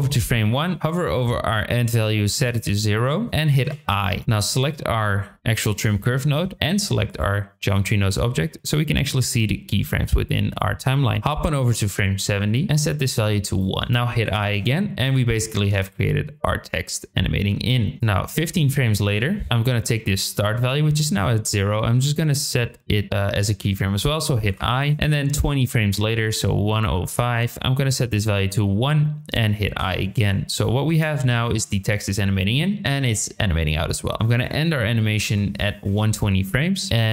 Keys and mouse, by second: 1.6 click, 4.3 click, 7.1 click, 10.0 click, 11.3-12.1 drag, 12.7 click, 15.4 click, 15.7 space, 18.0 click, 25.1-28.8 drag, 30.9 space, 34.1-36.5 drag, 34.1 space.